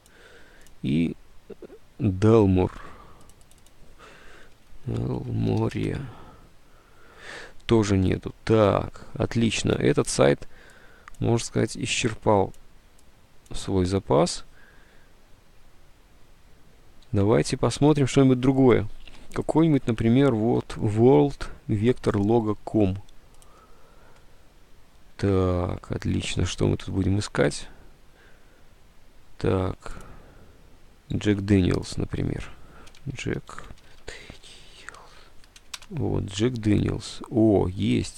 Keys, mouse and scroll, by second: 2.8 alt+Tab, 4.4-6.2 typing, 9.7 alt+Tab, 17.2 alt+Tab, 26.5 alt+Tab, 31.4 alt+Tab, 32.7-35.3 typing.